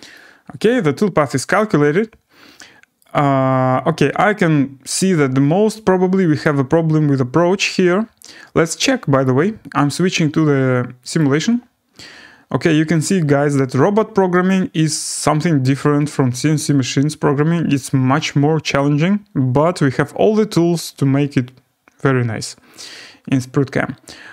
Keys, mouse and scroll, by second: 0.9 scroll, 3.0 right click, 3.9 scroll, 6.4 right click, 9.2 click, 11.2 click, 14.5 click, 15.9-17.1 scroll.